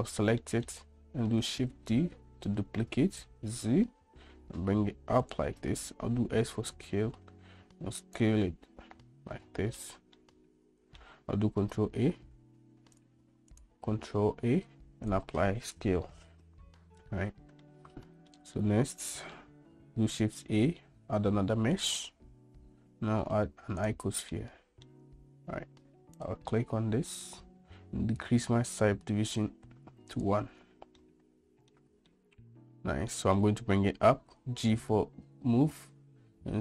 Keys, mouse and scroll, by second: 0.5 middle click, 1.6 shift+d, 6.2 s, 8.6-9.9 middle drag, 10.3-11.1 middle drag, 11.8 shift+a, 13.1 click, 14.1 ctrl+a, 17.8 shift+middle click, 18.3 shift+middle click, 18.7-19.5 middle drag, 20.3 shift+a, 24.5-25.0 middle drag, 30.3 click, 31.1-31.9 middle drag, 32.3-33.2 middle drag, 34.5 g.